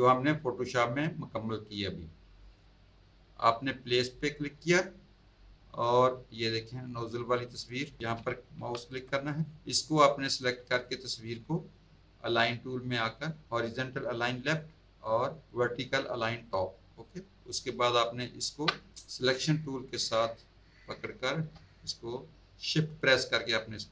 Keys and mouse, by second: 3.9 click, 7.4 click, 8.9 click, 9.4 click, 9.8 click, 10.4 click, 11.3 click, 12.9 click, 14.4 click, 16.4 click, 17.0 click, 17.6 click, 19.5 click, 21.0 click.